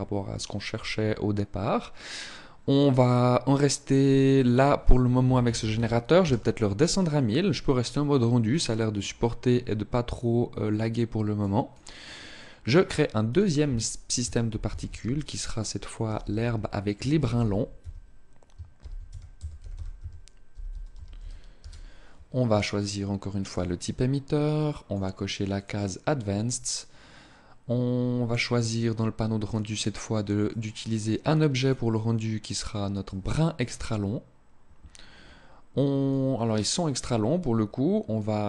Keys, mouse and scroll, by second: 4.1 click, 11.1 click, 13.0 click, 22.5 click, 24.3 click, 25.3 click, 26.2 click, 30.2 click, 31.3 click, 35.8 click.